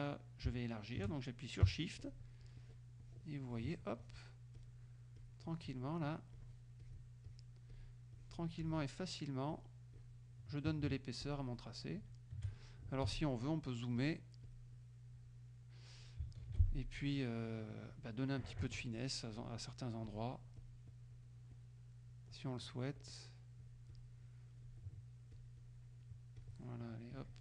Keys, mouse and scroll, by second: 2.1 shift+click, 2.7 shift+click, 3.1 shift+click, 3.6 shift+click, 4.1 shift+click, 4.6 shift+click, 5.2 shift+click, 6.1 shift+click, 6.9 shift+click, 7.3 shift+click, 7.8 shift+click, 8.2 shift+click, 8.7 shift+click, 9.5 shift+click, 10.0 shift+click, 11.3 shift+click, 13.1 z, 14.0 click, 14.5 click, 16.5 shift+F2, 18.7 KP_Add, 20.1 click, 20.6 click, 21.6 click, 22.7 click, 23.2 click, 24.0 click, 24.5 click, 25.4 click, 26.5 click, 27.2 click.